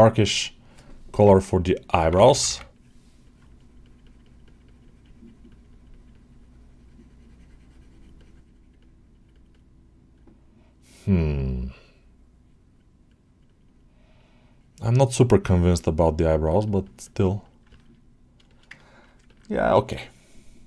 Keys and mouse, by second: 2.6-3.9 drag, 4.1 click, 4.5 click, 4.9 click, 5.1 click, 5.3 click, 5.8 click, 8.0 click, 9.0 click, 9.4 click, 10.0-11.4 drag, 12.3 click, 13.3-15.2 drag, 15.6 click, 15.8 click, 16.1 click, 16.7 click, 18.3 alt+shift+middle click, 18.6 ctrl+alt+middle click, 19.1 ctrl+alt+middle click, 20.6 click.